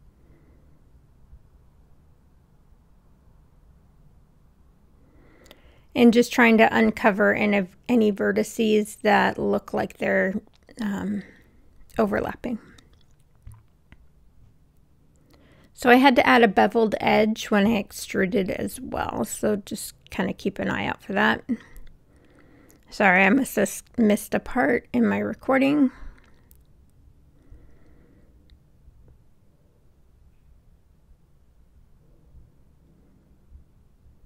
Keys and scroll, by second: 7.3 w, 28.2 Return.